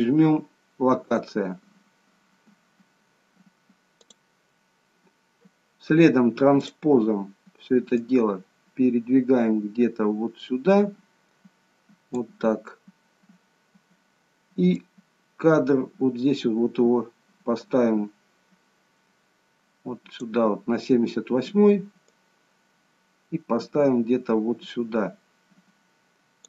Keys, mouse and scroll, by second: 6.6 click, 8.1 click, 14.8 click, 22.1 click.